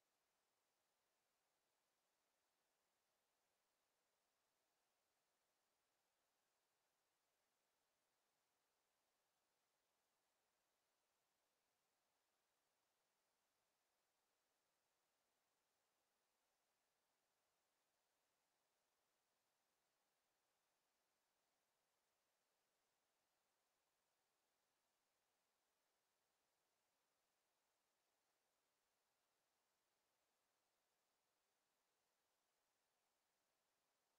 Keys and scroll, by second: 2.3 Delete, 4.6 ctrl+z.